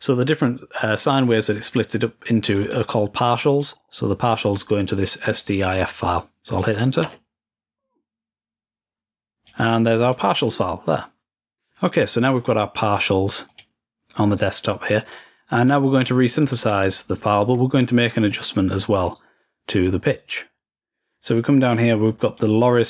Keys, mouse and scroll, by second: 2.2-5.3 drag, 6.2-7.3 drag, 9.4 click, 13.6 click, 14.8-17.5 drag, 17.5-20.9 scroll down 5, 21.8-22.8 drag.